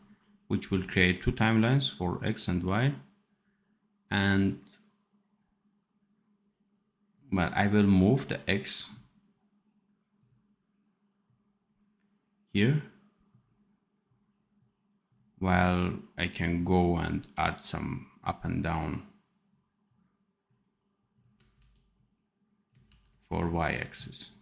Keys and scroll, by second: 21.5 ctrl+c, 22.8 ctrl+v.